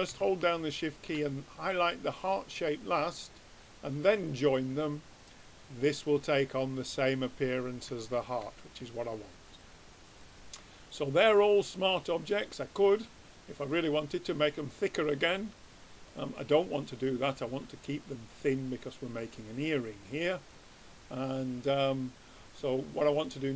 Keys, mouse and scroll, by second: 0.7-2.4 drag, 3.0-5.0 drag, 6.5 middle click, 6.7-9.4 middle drag, 9.4-11.2 drag, 11.2 middle click, 11.4-14.1 drag, 12.3 middle click, 15.2 middle click, 16.9-18.7 drag, 19.5-22.8 drag, 23.1 click.